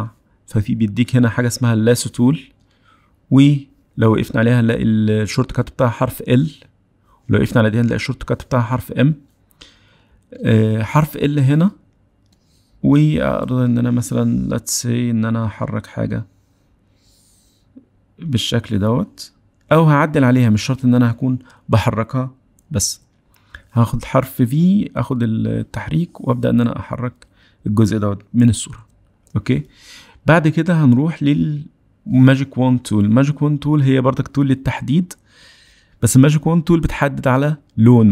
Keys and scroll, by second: 4.9 l, 10.5 l, 23.6 v, 31.8 w.